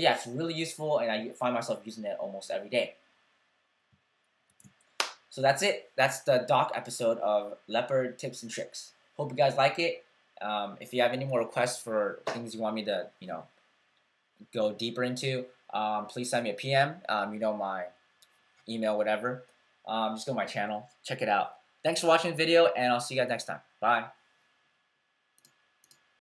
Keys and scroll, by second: 4.4 super+w.